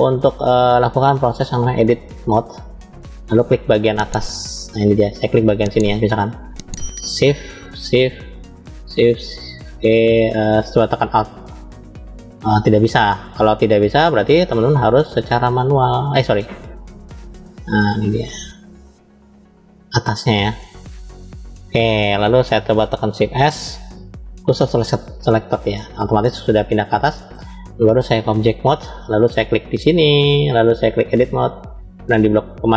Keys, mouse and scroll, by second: 1.4-2.3 drag, 3.2-5.9 middle drag, 6.5 click, 7.7 shift+click, 8.6 shift+click, 10.7 click, 11.5 alt+click, 13.1 shift+click, 13.9 alt+shift+click, 15.5 shift+click, 18.0 shift+click, 18.9 shift+click, 20.0-22.5 middle drag, 23.2 shift+s, 25.3-27.2 middle drag, 28.0-28.7 drag, 29.4 click, 30.8-31.6 drag.